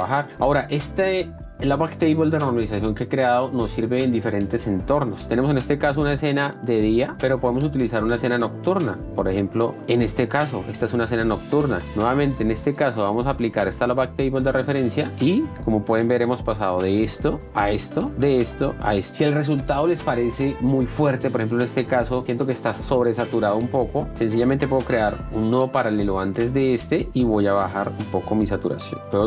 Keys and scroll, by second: 0.0-0.8 typing, 17.1 ctrl+d, 24.1 F1, 25.8 s.